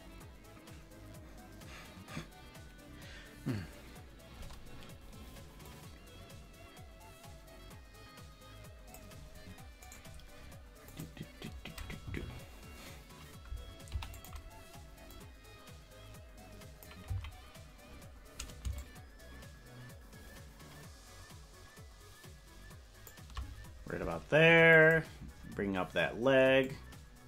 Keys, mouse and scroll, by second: 5.7-9.0 drag, 10.9 click, 10.9 right click, 12.1 Right, 13.9 i, 15.1-16.9 drag, 17.2 Left, 18.7-23.1 shift+drag, 24.8 click, 26.6-27.2 drag.